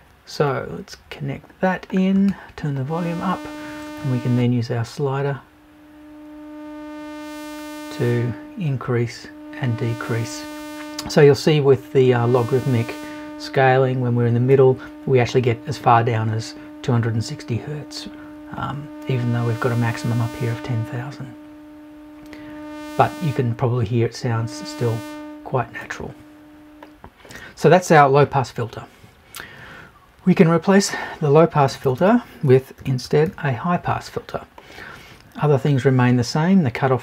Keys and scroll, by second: 31.7 BackSpace.